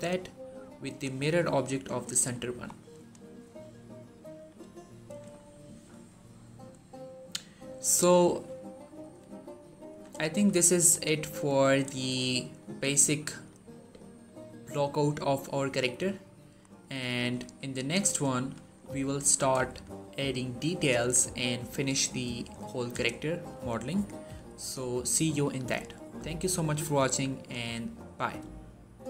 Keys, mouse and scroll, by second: 1.9 scroll down 1, 2.2 shift+middle click, 2.8 click, 3.2 scroll down 1, 3.5-4.4 shift+middle drag, 5.9-7.7 scroll up 1, 8.1 shift+middle click, 9.7 1, 10.1 shift+middle click, 10.5-11.5 scroll up 1, 11.5 scroll down 1, 11.9 shift+middle click, 12.6 scroll down 1, 12.8-13.4 middle drag, 17.2 1, 18.0 shift+middle click, 18.2 scroll up 1, 18.5 shift+middle click.